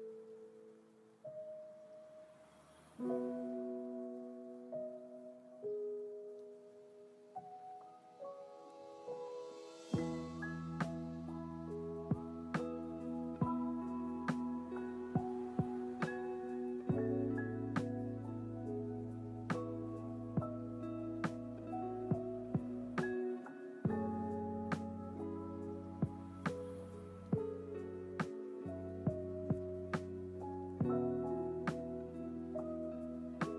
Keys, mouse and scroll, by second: 1.3 click, 2.0-2.5 scroll down 1, 2.5-3.1 scroll down 1, 3.1-4.7 scroll down 1, 4.7-6.0 scroll down 1, 6.0-7.8 drag, 8.9 ctrl+z, 9.5 ctrl+z, 10.9 click, 11.9 ctrl+z, 12.3 ctrl+z, 13.3 ctrl+z, 13.6 ctrl+z, 14.1 ctrl+z, 14.5 ctrl+z, 14.8 ctrl+z, 15.3 ctrl+z, 16.2 click, 17.5-18.1 drag, 19.1 ctrl+z, 21.8 ctrl+shift+z, 22.6 ctrl+z, 26.4 click, 30.3 click, 31.3 click, 33.0 g.